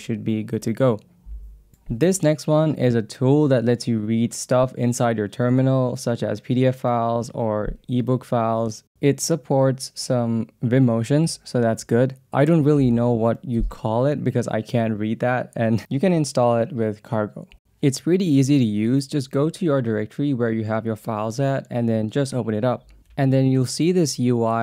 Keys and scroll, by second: 12.3 Down, 18.0-19.1 typing, 20.4 Up, 23.0 Return.